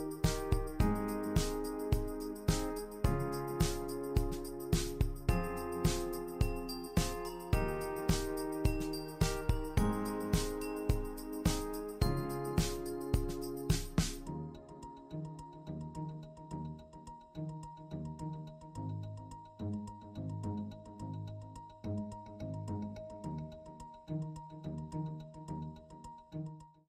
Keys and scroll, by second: 0.8 super+c, 1.0 super+v, 11.5-12.6 typing.